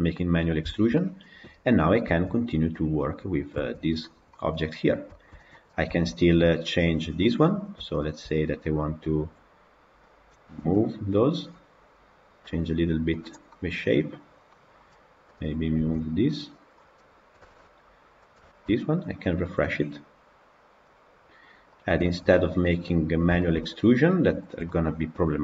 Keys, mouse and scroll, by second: 1.7 click, 2.1 Tab, 3.6 Tab, 4.0 scroll down 2, 4.2-5.5 middle drag, 5.5 click, 5.8-6.4 shift+middle drag, 6.4 Tab, 6.6-7.2 scroll up 2, 7.2 click, 7.9 shift+click, 9.9 click, 10.6 g, 13.3 middle click, 14.1 scroll down 3, 14.4 middle click, 15.2 click, 15.8 g, 17.4 Tab, 18.2 click, 18.3-20.7 shift+middle drag, 20.7-21.7 drag, 21.9-22.9 shift+middle drag, 22.9-23.3 scroll up 1, 23.3-25.4 shift+middle drag.